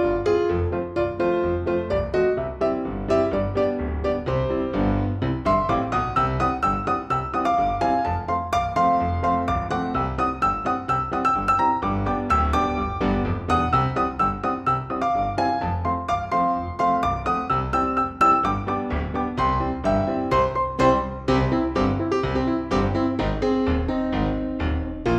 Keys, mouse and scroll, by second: 0.9 click, 1.0 shift+a, 1.5 middle drag, 1.8 scroll up 5, 2.6 middle click, 3.4 middle click, 3.6 s, 3.8 middle click, 4.0 scroll down 4, 4.2 middle click, 4.7 middle click, 4.9 click, 5.3 middle click, 5.8 click, 5.9-7.7 typing, 6.3 click, 6.3 middle click, 6.8 click, 7.1 click, 7.5 click, 8.2 click, 8.5 ctrl+z, 9.4 click, 9.5 g, 9.7 middle click, 9.9 scroll down 3, 10.0 middle click, 11.1 click, 11.6 click, 11.7 middle click, 12.3 click, 12.4 middle click, 13.0 middle click, 13.1 click, 13.1 g, 13.3 middle click, 13.6 middle click, 13.9 middle click, 14.0 click, 14.1 g, 14.2 middle click, 14.8 middle click, 15.5 middle click, 16.0-16.4 drag, 16.4 click, 16.6 middle click, 16.7 middle click, 16.8 click, 16.9 middle click, 17.2 click, 18.0 g, 18.5 click, 18.7 middle click, 18.9 middle click, 19.2 click, 19.7 click, 19.8 click, 20.6 click, 20.7 click, 21.4 click, 21.6 click, 22.7 click, 22.9 click, 23.5 e, 24.0 middle click, 24.7 middle click.